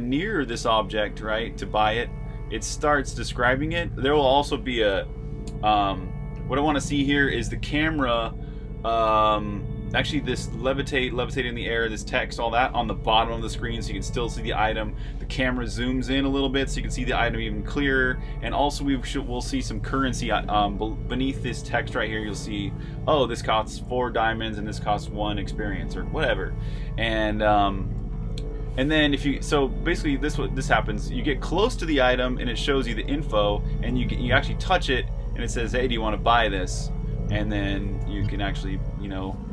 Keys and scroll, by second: 0.8-1.9 typing, 29.5-32.6 typing, 33.8-34.5 typing, 38.1-38.8 typing.